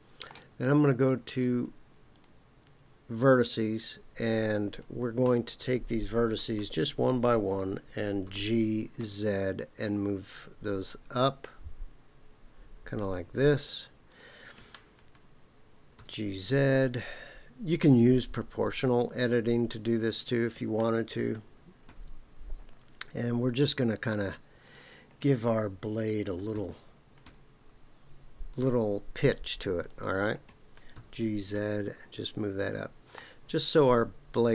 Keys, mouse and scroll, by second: 2.1 click, 4.7 click, 8.2 g, 9.0 z, 13.0 click, 14.0 click, 15.9 g, 16.6 z, 19.2 click, 20.0 click, 21.1 g, 21.8 z, 23.6 click, 24.6 click, 26.5 g, 27.2 z, 28.5 click, 29.8 click, 30.9 g, 31.5 z, 32.5 click, 33.1-34.5 middle drag.